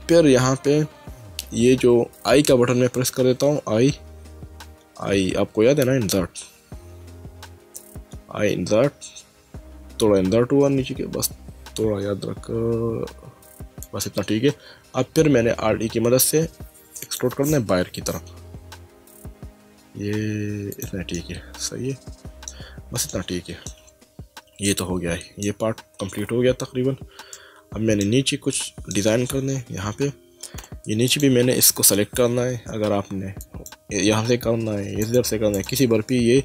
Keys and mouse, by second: 13.8 click, 15.6 alt+e, 17.0 click, 20.7 click, 21.1 middle click, 23.1 middle click, 24.6 middle click, 26.2 Tab, 27.3 middle click, 28.5 middle click, 30.6 Tab, 31.1 click, 33.4 click, 35.0 click.